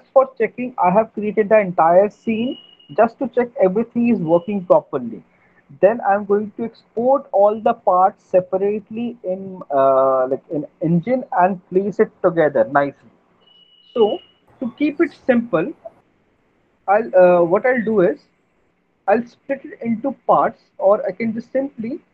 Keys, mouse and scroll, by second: 14.7 alt+middle click, 16.0 alt+middle click, 16.4 middle click, 17.0 alt+middle click, 17.6 middle click, 17.8 middle click, 18.4 middle click, 18.6 middle click, 18.8 alt+middle click, 19.7 middle click, 19.8 alt+middle click, 20.0 middle click.